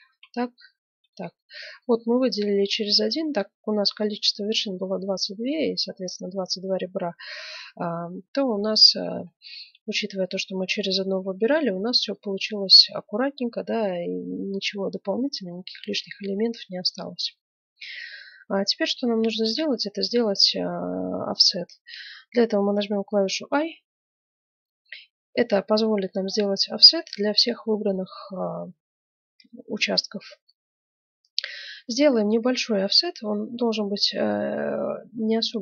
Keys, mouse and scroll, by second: 0.6 middle click, 0.7 right click, 1.4-2.5 middle drag, 2.5 right click, 2.7 middle click, 9.2-10.8 scroll up 1, 10.8 scroll up 1, 11.1-11.5 scroll down 1, 11.5-13.4 middle drag, 15.4-17.1 middle drag, 17.3-20.1 middle drag.